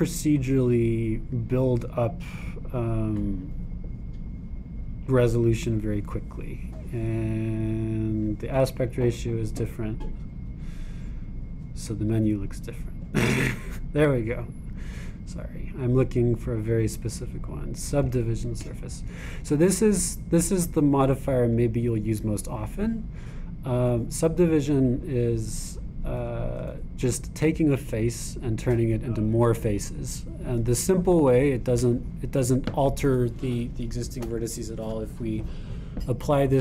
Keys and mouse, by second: 20.9-23.4 middle drag, 23.4-25.9 drag.